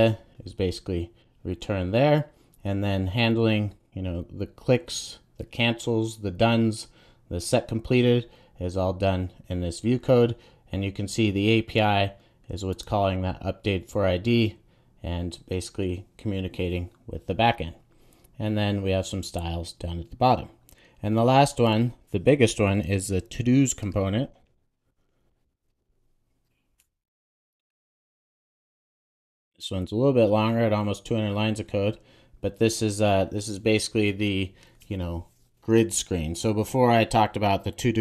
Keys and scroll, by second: 22.8 super+n, 28.5 Return, 28.9 super+s.